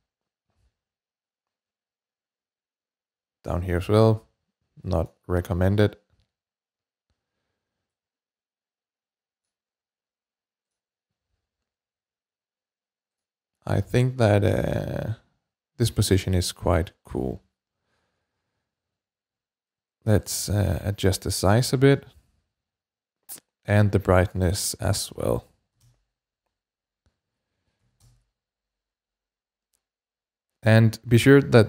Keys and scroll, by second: 24.9 4, 25.0 BackSpace, 25.5 4, 25.6 Return, 27.6 typing, 27.8 Return.